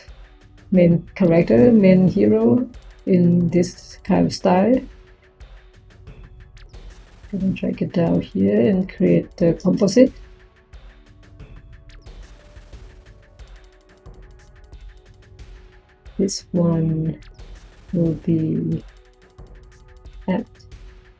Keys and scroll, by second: 9.4 Tab, 9.9 c, 10.4 o.